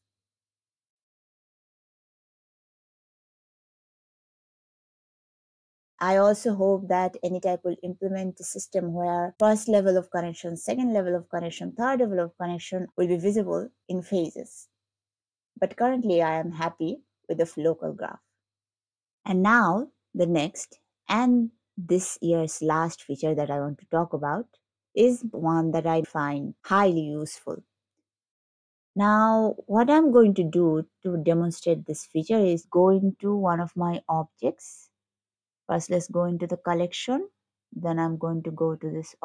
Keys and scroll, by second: 0.0 scroll.